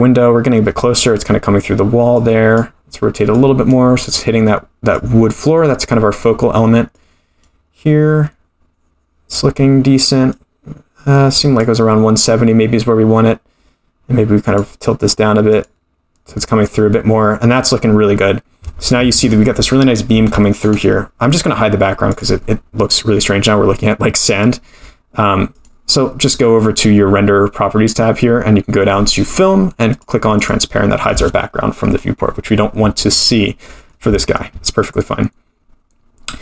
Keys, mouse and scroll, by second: 2.1 click, 3.3 click, 4.9 click, 6.9 click, 10.3-11.6 drag, 14.4 click, 15.5 click, 17.5 click, 21.4-22.1 scroll down 4, 22.1 click, 22.7-24.6 scroll down 2, 25.5 click, 28.8-29.9 scroll down 1, 29.9 click, 29.9 scroll down 1, 30.4 click, 33.1 click, 33.6 middle drag, 34.2 shift+middle drag.